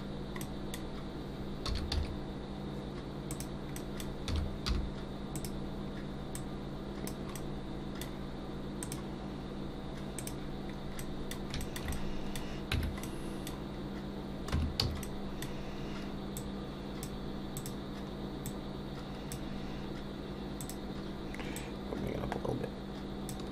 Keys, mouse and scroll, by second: 0.4 middle click, 1.6 s, 3.7 middle click, 4.3 s, 6.3 click, 7.3 middle click, 10.2 middle click, 10.7-11.1 scroll up 2, 11.0 middle click, 11.9 middle click, 12.7 Tab, 13.0 middle click, 13.8 scroll down 1, 14.5 Tab, 14.8 a, 15.0 middle click, 16.3 click, 17.5 click, 18.4 click.